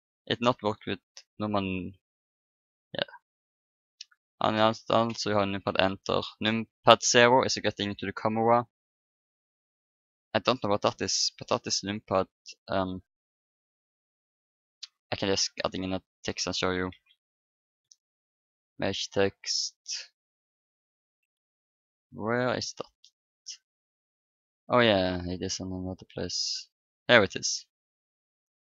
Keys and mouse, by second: 1.1 shift+=, 4.4 KP_Enter, 4.9 KP_Enter, 6.4 KP_0, 8.3 KP_Decimal, 10.5-13.0 middle drag, 15.6-16.9 right drag, 16.9 shift+a, 28.4-28.7 drag.